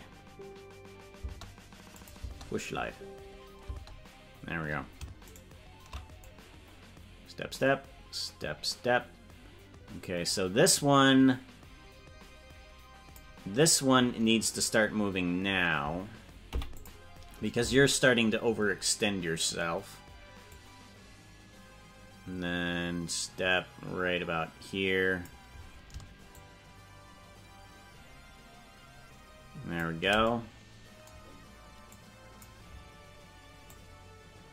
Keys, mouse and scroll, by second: 2.0 click, 2.2 space, 5.4 shift+right click, 6.3-13.3 drag, 16.5 i, 20.6-25.3 drag, 26.3-29.8 shift+drag, 32.0 click, 33.6-34.5 drag.